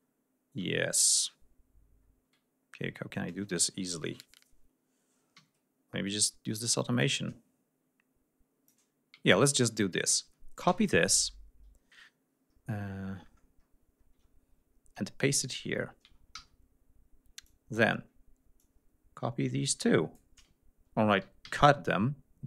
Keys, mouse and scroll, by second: 0.0-1.5 scroll up 6, 2.0 scroll up 2, 5.4 r, 7.0-8.9 drag, 9.3 ctrl+click, 10.7 ctrl+c, 12.5-13.3 scroll down 4, 13.3-14.2 scroll up 4, 16.4 ctrl+v, 17.5 click, 18.6-20.4 drag, 21.5 ctrl+x.